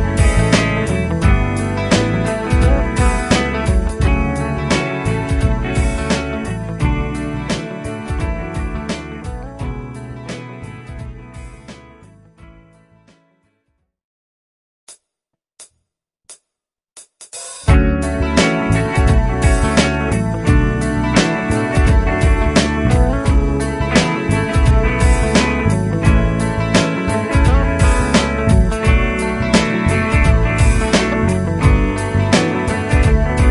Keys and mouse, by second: 1.5 F3, 2.7 F3, 4.8 F2, 6.9 F3, 8.5 ctrl+click, 11.1 F4, 13.1 F2, 15.5 right click.